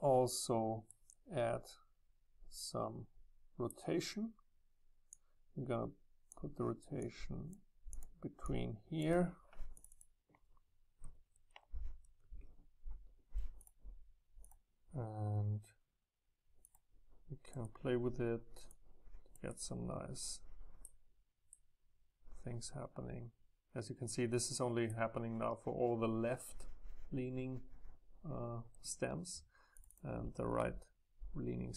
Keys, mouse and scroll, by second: 7.9-8.4 scroll up 2, 8.4-9.8 scroll up 1, 12.0 Delete, 16.8 click, 17.5-18.7 middle drag, 18.7 click, 19.5-22.7 middle drag, 24.2-26.7 right drag, 29.9-31.7 drag.